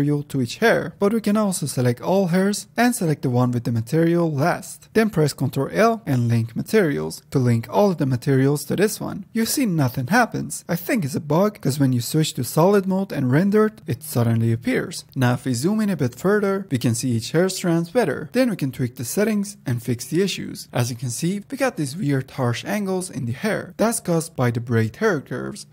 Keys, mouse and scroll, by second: 4.8 ctrl+l, 7.3 ctrl+l, 10.9 click, 13.4 z, 14.7 click, 15.7-16.3 shift+middle drag, 18.8 n, 23.2 click.